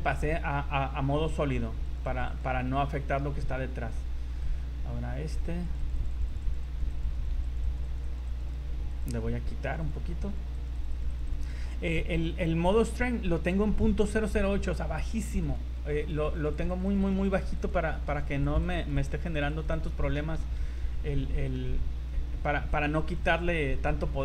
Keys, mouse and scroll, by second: 1.2 click, 1.4 z, 1.8 click, 2.0 click, 2.4 click, 2.5-2.8 scroll down 3, 3.6 scroll down 3, 4.5 right click, 5.0-5.6 scroll up 8, 5.6 click, 5.8 click, 6.0 click, 6.2 click, 6.4 click, 6.6 click, 6.9 z, 7.0 click, 7.2 click, 7.3 z, 7.4 click, 7.6 click, 7.8 click, 8.0 click, 8.4 click, 8.6 click, 8.9 click, 10.3-11.1 click, 10.5 click, 11.3 click, 11.5 click, 15.2 click, 15.5 click, 15.8 click, 16.0 click, 16.2 click, 16.3 click, 16.5 click, 16.7 click, 17.0 click, 17.0 click, 17.5 click, 18.6 click, 18.8 click, 19.0 click, 19.2 click, 19.6 click, 19.8 click, 20.0 scroll down 3, 20.4 z, 20.7 middle click, 21.5 scroll down 1, 23.1 click.